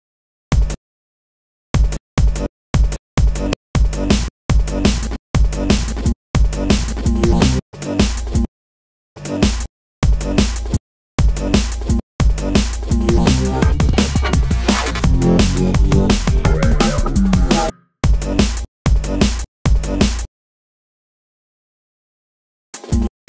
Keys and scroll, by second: 11.7 space, 12.1 shift+super+t, 16.7 space, 21.7 shift+super+space.